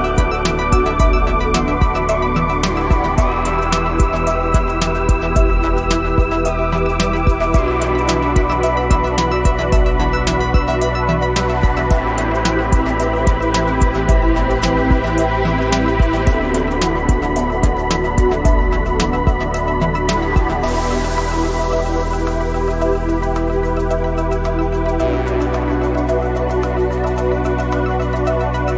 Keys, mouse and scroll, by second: 0.7 x, 1.3 click, 2.0 click, 2.7 click, 3.2 [, 3.3 click, 4.1 scroll up 1, 4.2 click, 5.0 scroll down 1, 5.2 click, 5.4-6.0 scroll up 3, 5.5 click, 5.8 click, 6.0 click, 6.9 click, 7.9 ], 8.0 click, 8.5 scroll up 2, 9.4 click, 10.1-12.8 typing, 10.5 click, 11.2 click, 11.6 click, 11.9 click, 12.3 click, 12.6 scroll up 1, 12.9 click, 14.7 [, 14.8-16.6 drag, 19.2 space, 19.3 click, 19.4 space, 19.5 click, 19.8-20.1 scroll up 1, 20.1 click, 21.4 scroll up 1, 21.7 click, 23.0 click, 24.7 ctrl+alt+shift+e, 26.6 scroll up 1, 28.5 click.